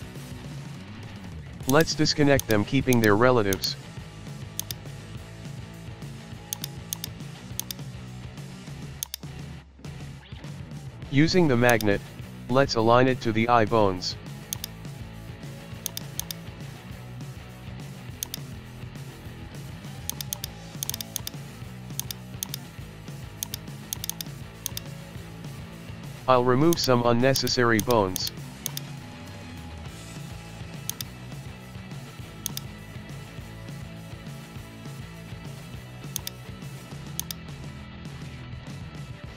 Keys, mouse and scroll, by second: 0.3 alt+p, 2.4 click, 3.6 shift+right click, 4.6-5.7 drag, 5.7-6.5 scroll up 2, 6.5 click, 6.9-8.3 drag, 8.3 shift+middle click, 9.1-10.5 drag, 10.6 shift+middle click, 10.8-11.2 scroll, 11.2 shift+middle click, 11.7 right click, 12.0-12.4 scroll up 1, 12.4-13.5 middle drag, 13.5 KP_3, 13.7-14.5 scroll up 1, 14.5-15.8 drag, 15.9 right click, 16.2-16.7 drag, 16.7-17.4 middle drag, 17.8 shift+middle click, 18.2-18.9 drag, 19.2-19.6 middle drag, 19.7-20.1 shift+middle drag, 20.1 click, 20.5-20.8 scroll up 1, 20.8 right click, 20.9 right click, 21.4 m, 22.4 click, 22.6 scroll down 1, 22.7 shift+middle click, 23.4 click, 23.9 click, 24.1 right click, 25.0 shift+middle click, 25.2 KP_1, 25.3 shift+middle click, 25.4-25.9 scroll up 1, 25.9 shift+middle click, 26.0 scroll up 1, 26.2 Tab, 26.7 drag, 27.8 shift+click, 28.6 shift+drag, 29.4 scroll up 2, 29.6-30.2 shift+middle drag, 30.2-30.9 scroll up 1, 30.9 shift+right click, 31.9 x, 32.9-33.4 scroll down 2, 33.0 KP_1, 33.6 shift+middle click, 33.8-35.4 scroll up 2, 35.4 ctrl+z, 36.1 click, 36.9 x, 37.9 scroll down 1, 38.3 shift+middle click, 38.7-39.3 scroll down 1.